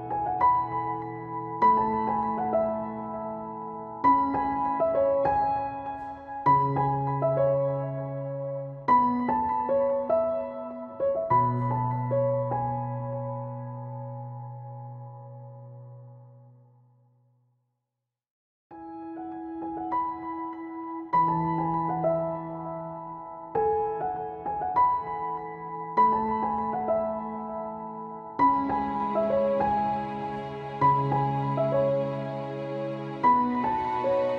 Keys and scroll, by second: 1.7 Caps_Lock, 18.0 BackSpace, 18.3 ctrl+shift+Left.